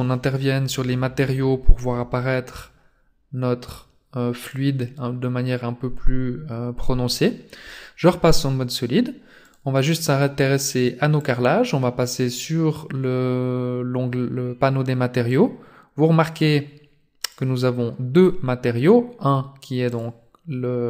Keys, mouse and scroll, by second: 4.4 click, 7.0-7.7 scroll down 3, 8.3-9.0 scroll up 1, 9.3 right click, 11.0 click, 15.2 click.